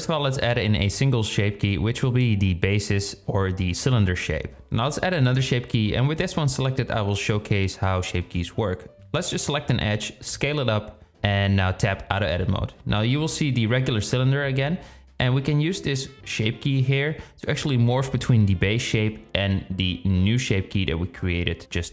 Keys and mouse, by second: 2.2 click, 7.6 Tab, 8.7 click, 11.0 s, 12.6 Tab, 15.4-21.9 drag.